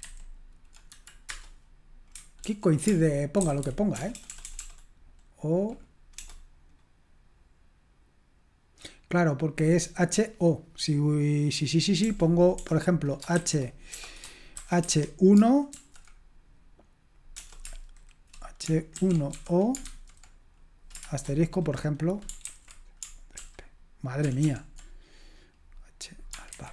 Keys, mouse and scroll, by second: 0.0 alt+b, 0.9 Delete, 1.3 Return, 2.4 ctrl+p, 3.4 alt+g, 3.4 alt+f, 3.6 alt+g, 4.0 alt+BackSpace, 4.5 BackSpace, 4.6 BackSpace, 6.2 BackSpace, 12.0-15.7 typing, 17.4 BackSpace, 18.7-20.3 typing, 21.1 shift+Return, 22.4 ctrl+c, 24.4 ctrl+p, 26.5 alt+b.